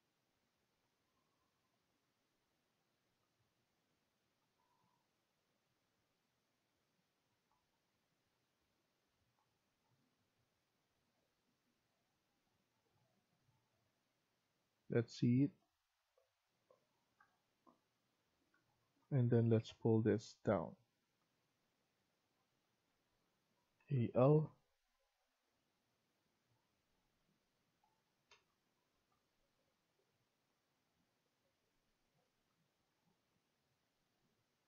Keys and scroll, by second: 4.0 Escape, 13.2 Escape, 13.5 Escape, 14.8 Escape, 22.2 Escape, 22.8 Escape.